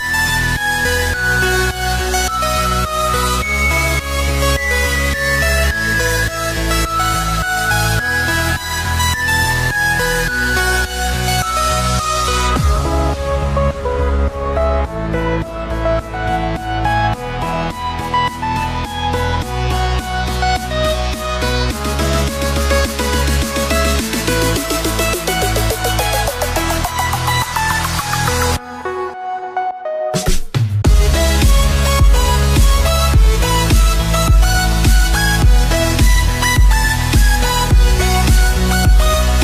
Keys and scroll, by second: 5.9 ctrl+-.